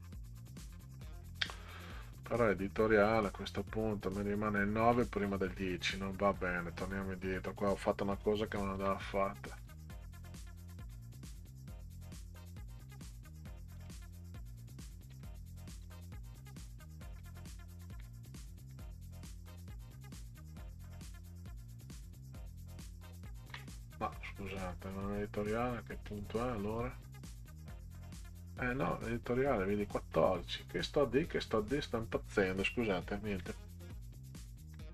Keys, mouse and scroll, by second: 1.5 click, 8.8 ctrl+z, 9.5 ctrl+z, 10.1 ctrl+z, 10.6 ctrl+z, 11.9 ctrl+z, 12.9 ctrl+z, 13.8 ctrl+z, 14.3 ctrl+z, 15.9 ctrl+z, 17.1 ctrl+z, 17.9 ctrl+z, 18.6 ctrl+z, 19.4 ctrl+z, 25.0 scroll down 2, 26.1 click, 28.4-29.0 scroll down 4, 30.6 scroll up 2, 31.3 click, 33.3 ctrl+shift+z, 33.6 ctrl+shift+z, 33.9 ctrl+shift+z, 34.8-34.9 scroll down 4.